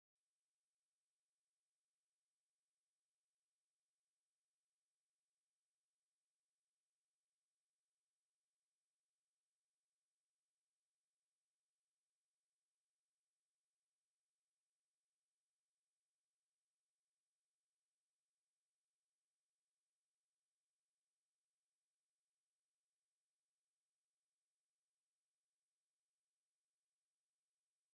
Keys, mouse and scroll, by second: 0.4 click, 10.1 click, 18.2 click.